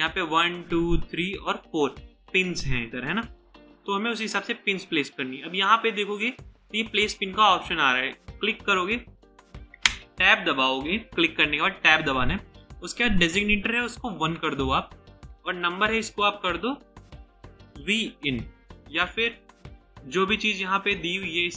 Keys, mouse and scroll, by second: 9.8 Tab, 14.2 typing, 17.4-18.8 typing.